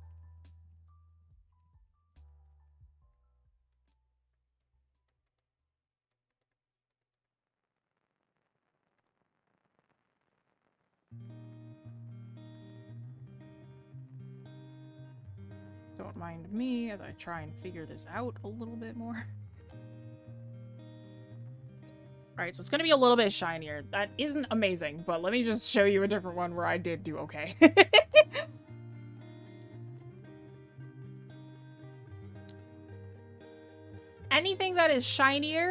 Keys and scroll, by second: 17.7 ctrl+z.